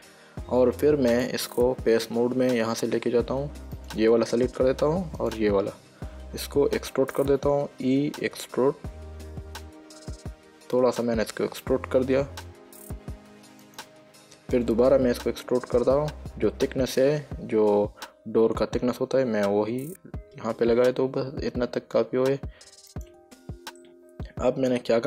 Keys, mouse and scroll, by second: 1.4 click, 4.0 click, 5.5 click, 8.8 e, 13.9 click, 16.1 e, 23.2 click, 24.1 middle click.